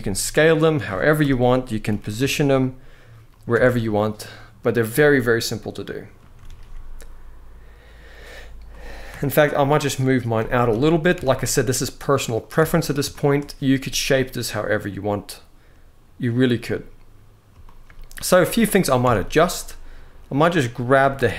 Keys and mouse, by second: 0.9 KP_1, 1.6 g, 1.9 z, 3.0 click, 3.3 alt+a, 3.5-5.9 middle drag, 6.2 ctrl+s, 8.8 KP_1, 9.5-9.9 drag, 10.1 g, 10.4 z, 10.9 x, 12.3 alt+a, 12.8-13.1 shift+middle drag, 17.4 shift+middle drag, 17.9 z, 18.7 Tab, 19.4 click, 20.7 g, 20.9 z.